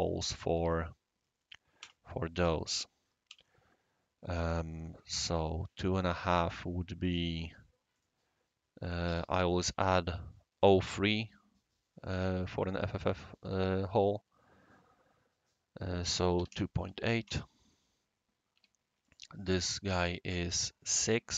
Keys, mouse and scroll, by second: 0.5 q, 1.8 space, 3.2 c, 5.3 click, 7.9 click, 8.4 click, 16.3-16.8 typing, 17.2 Return, 18.5 Escape, 19.0 click, 19.1 typing.